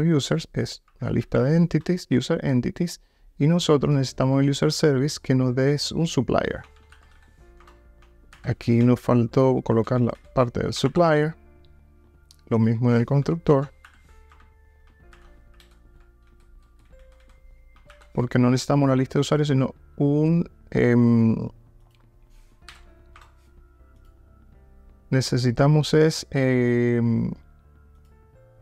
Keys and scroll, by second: 1.3 super+e, 4.6 super+b.